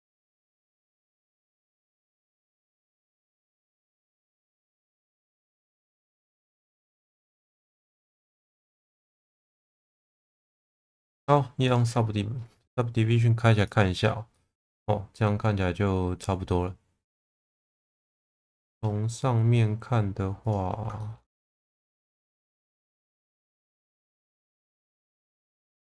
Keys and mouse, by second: 0.5 shift+middle click, 1.6 click, 2.5 click, 3.7 click, 6.2 click, 6.8 click, 7.9 click, 9.4 shift+middle click, 9.8 Tab, 11.7 click, 14.3-17.8 middle drag, 18.1 shift+middle click, 18.5 Tab, 21.0 shift+middle click, 21.7 click, 22.3 click, 22.5 click, 23.7 shift+v, 24.5 click, 25.2 shift+middle click, 25.6 click.